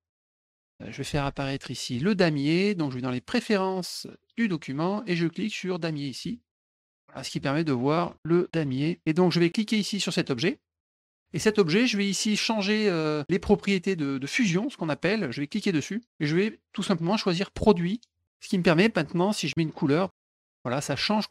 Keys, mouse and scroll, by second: 0.4 middle click, 4.3 click, 5.8 click, 6.8 middle click, 7.0 middle click, 7.9 middle click, 8.1 middle click, 8.5 middle click, 8.6 middle click, 10.0 click, 15.5 click, 17.5 click, 20.0 click, 20.5 middle click.